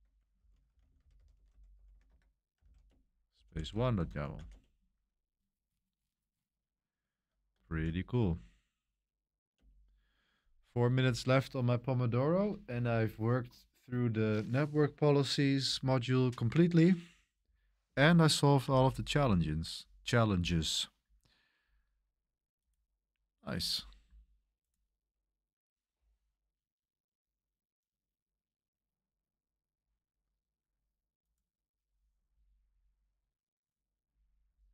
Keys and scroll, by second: 0.1-5.7 typing, 3.5 super+v, 3.9 Escape, 7.6 shift+;, 8.1 q, 9.5 Return, 18.7 super+1.